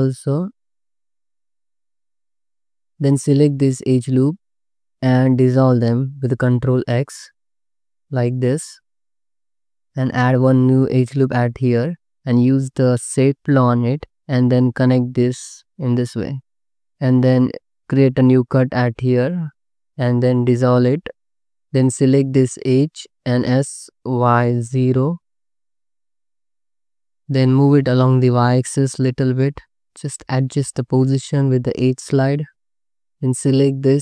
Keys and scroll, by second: 5.4 ctrl+x, 10.3 ctrl+r, 14.1 1, 15.8 j, 16.8 1, 18.9 space, 20.1 c, 20.3 2, 21.0 ctrl+x, 23.3 s, 24.2 y, 24.8 0, 30.4 g, 32.9 2.